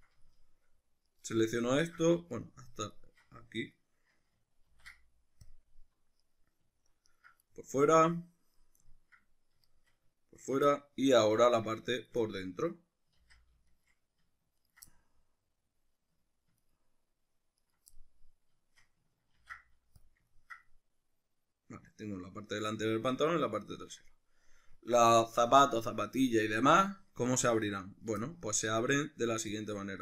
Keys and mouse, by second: 1.1 right click, 1.8 ctrl+middle click, 2.4 alt+right click, 3.0 alt+shift+right click, 4.7 ctrl+e, 6.2 right click, 7.1 ctrl+right click, 7.5-9.7 middle drag, 9.7 shift+right drag, 10.4 ctrl+right drag, 10.7-12.0 middle drag, 12.0 shift+right click, 12.2-13.7 middle drag, 13.2 ctrl+z, 13.7 shift+right click, 14.6 ctrl+right click, 14.9-16.6 middle drag, 16.6 ctrl+right click, 17.6 ctrl+right click, 17.9-19.3 middle drag, 19.3 ctrl+e, 20.3-30.0 ctrl+middle drag.